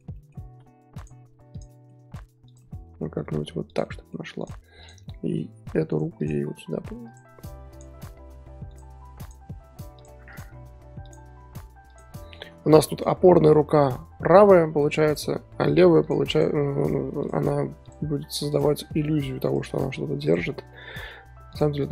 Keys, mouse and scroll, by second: 0.4 r, 1.5 click, 1.7-2.1 middle drag, 2.1 r, 2.6-3.3 middle drag, 3.3 r, 3.8-4.4 middle drag, 4.4 click, 4.8 click, 5.0-5.5 middle drag, 5.5 r, 6.2 click, 6.4 r, 7.7 click, 7.9-8.2 middle drag, 8.2 r, 9.2 drag, 9.5 r, 10.3 click, 10.5 r, 11.9 click, 12.3 scroll up 1, 12.3-15.4 middle drag, 15.4-16.0 scroll up 3, 16.0 drag, 16.3 click, 16.7 scroll up 1, 16.8-17.2 middle drag, 17.2 click, 17.4 r, 18.5 click, 18.8 r, 20.2 click, 20.7 middle click, 21.1 r.